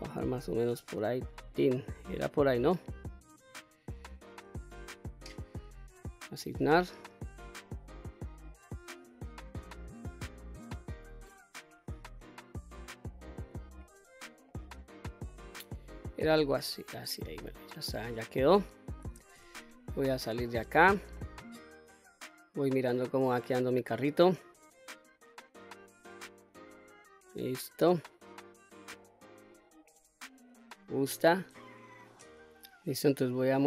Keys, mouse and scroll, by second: 2.1 click, 4.9 ctrl+z, 6.2 click, 7.4 click, 9.6-10.3 scroll up 2, 10.3-11.1 scroll down 1, 11.1-11.7 scroll up 2, 11.7 scroll down 1, 12.2 middle click, 13.4 middle click, 13.8 click, 14.5 middle click, 15.6 scroll up 2, 16.1 scroll down 1, 16.6-19.0 middle drag, 19.3 Tab, 19.9-20.5 middle drag, 20.7 scroll down 1, 21.1-22.8 middle drag, 23.1-23.7 scroll up 2, 23.7-25.3 middle drag, 25.8-26.4 middle drag, 26.8-27.1 scroll down 1, 27.2-29.5 middle drag, 32.5 middle click, 33.3 click.